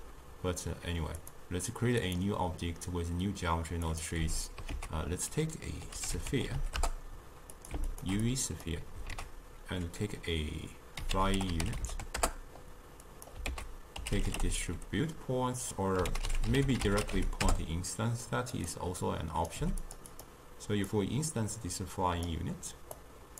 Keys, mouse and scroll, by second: 1.2-2.2 drag, 3.9 click, 4.2 x, 4.8 ctrl+a, 6.6 e, 7.9 alt+shift+click, 8.3-9.2 drag, 9.2 ctrl+a, 13.5 ctrl+a, 19.1 click, 19.6 g, 20.2 drag, 21.0 drag, 23.0-23.3 drag.